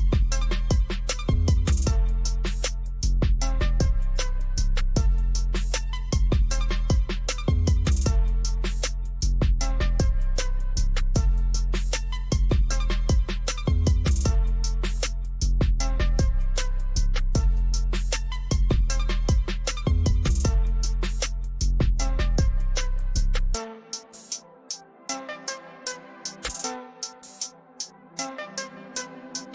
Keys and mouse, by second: 0.4 click, 5.3 click, 8.2-13.6 drag, 13.8-21.5 drag, 23.8-27.4 drag.